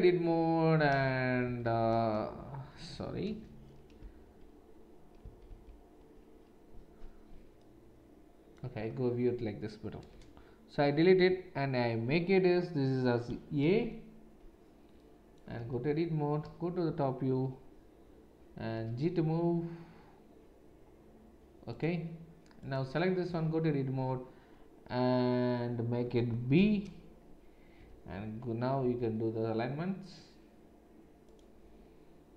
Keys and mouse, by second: 1.6 shift+z, 3.2 BackSpace, 5.5 ctrl+shift+z, 10.1 BackSpace, 13.6 shift+a, 15.6 Tab, 16.4 KP_7, 18.7 g, 22.6 click, 22.7-32.3 middle drag, 23.3 Tab, 26.0 BackSpace, 26.5 shift+b, 27.8 Tab, 28.8 g.